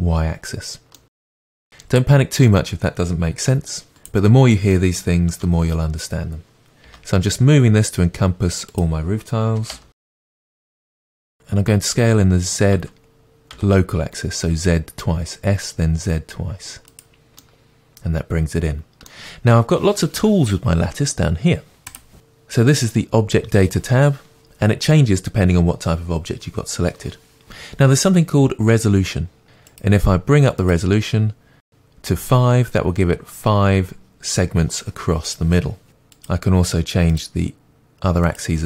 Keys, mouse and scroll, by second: 0.9-3.9 middle drag, 3.9 s, 5.3 KP_7, 6.9 g, 9.5 s, 10.3-29.4 middle drag, 11.3 s, 29.4-38.6 drag.